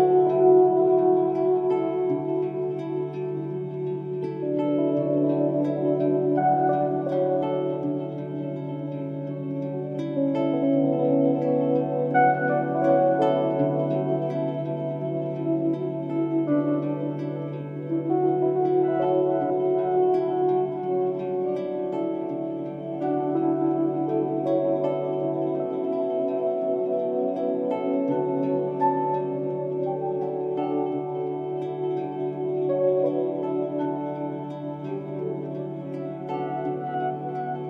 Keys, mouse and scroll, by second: 10.0 3, 10.2 0, 10.8 Return, 12.1 Escape.